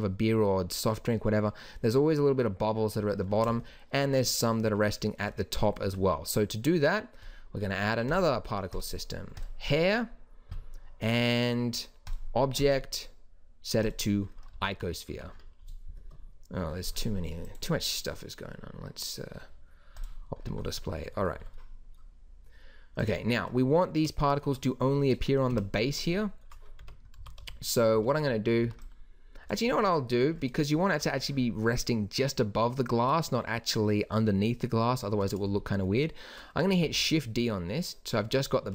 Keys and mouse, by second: 8.1-9.5 drag, 10.8 middle click, 12.1-14.5 drag, 14.5 z, 15.2 z, 20.4-22.0 drag, 23.0-26.0 drag, 25.5 KP_1, 26.2 click, 26.8 Tab, 27.2-28.6 typing, 36.8 shift+d.